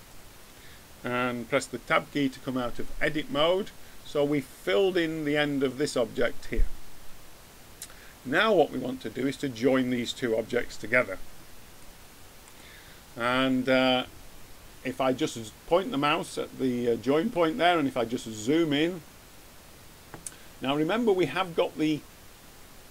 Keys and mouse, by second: 2.4 Tab, 9.7-11.0 middle drag, 11.2-15.0 middle drag, 17.1 middle click, 18.3 middle click, 18.5-22.9 middle drag.